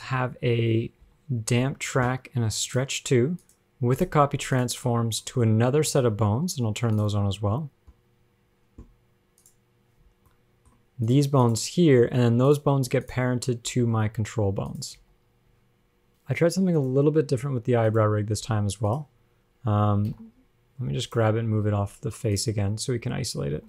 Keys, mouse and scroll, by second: 0.2 scroll down 1, 0.3 middle click, 0.6-1.3 scroll up 2, 1.3 KP_Decimal, 2.9 click, 3.6 click, 4.2 click, 4.8 click, 5.1-5.5 scroll down 6, 5.5 middle click, 5.9 scroll up 1, 6.1 shift+middle click, 7.2 click, 7.8-8.8 scroll up 22, 9.7 shift+click, 10.3-10.7 scroll up 2, 10.5 middle click, 11.3 click, 11.8 click, 12.8 click, 13.9 click, 14.0 g, 15.2 a, 16.1 alt+r, 16.1 alt+g, 16.1 shift+middle click, 16.1 scroll down 10, 16.3 scroll up 3, 17.0 click, 18.1 click, 18.8 g, 20.3 alt+r, 20.4 alt+g, 21.3 click, 22.6 click, 23.2 scroll up 2.